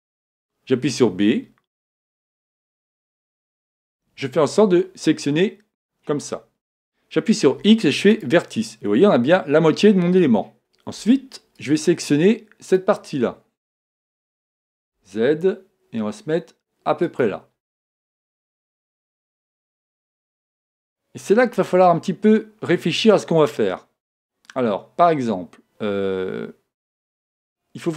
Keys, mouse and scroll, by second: 0.8 b, 7.5 x, 11.0 b, 13.9 g, 17.2-19.1 drag, 18.8 a.